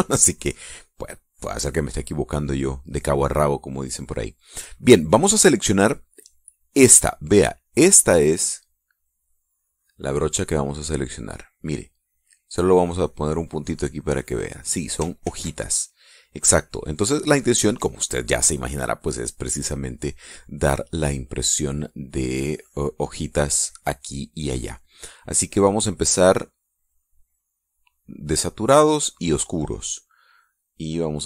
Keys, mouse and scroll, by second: 4.4-6.4 drag, 9.0 click, 13.5 click, 15.7 ctrl+z, 18.0 click, 22.7 click, 25.2-29.6 drag.